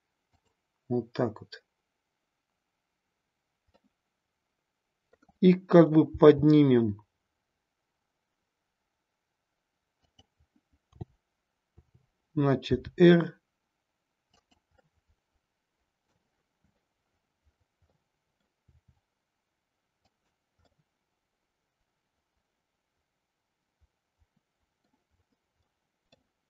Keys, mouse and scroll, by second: 3.8-5.2 middle drag, 6.1 g, 10.1 click, 10.9 t, 11.8 t, 12.6 r, 14.3 click, 14.9-16.3 middle drag, 17.9-18.5 middle drag, 18.7 r, 20.1 click, 20.7-25.0 middle drag, 25.7-26.3 middle drag.